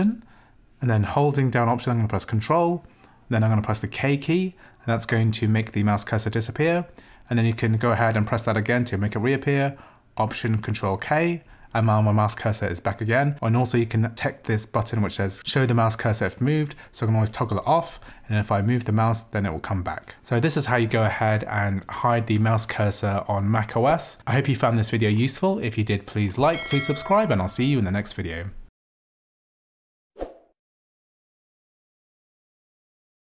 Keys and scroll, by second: 4.0 ctrl+alt+k, 11.0 ctrl+alt+k, 17.5 ctrl+alt+k.